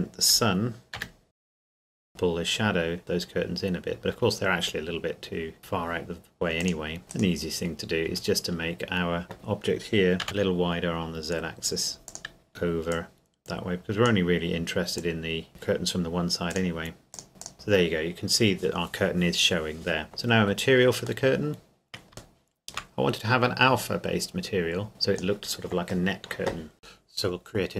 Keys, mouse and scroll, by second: 0.9 r, 1.2 z, 1.8 click, 2.0 scroll down 1, 3.0 middle click, 5.6 click, 7.0 middle click, 7.1 right click, 7.7 scroll up 1, 8.0 Tab, 10.2 s, 12.0 click, 12.5 Escape, 12.9 click, 15.5 KP_0, 16.5 click, 17.5 click, 20.0 middle click, 20.2-20.5 scroll down 1, 21.2 middle click, 23.1 scroll up 1, 24.9 click, 26.8-27.7 scroll up 1.